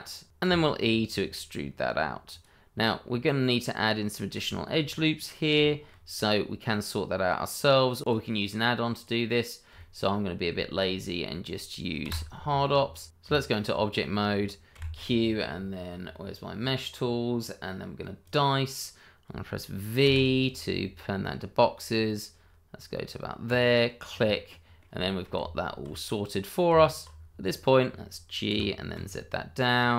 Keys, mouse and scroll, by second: 0.0 scroll down 1, 0.4 e, 2.3 click, 2.7 middle click, 4.5 shift+middle click, 4.8 scroll up 1, 5.6 shift+middle click, 7.9-8.3 scroll down 1, 8.3 middle click, 9.1 click, 11.4 shift+middle click, 11.7 scroll down 1, 12.0 shift+middle click, 12.3-13.0 scroll up 1, 13.1 Tab, 14.7 q, 18.2 click, 20.0 v, 21.0-21.9 scroll up 1, 22.6-23.4 scroll down 1, 23.4 click, 24.3 middle click, 25.0 shift+middle click, 25.3 Tab, 26.1-26.7 scroll up 1, 26.7 Tab, 27.1 scroll down 1, 27.4 middle click, 28.5 g, 28.9 z.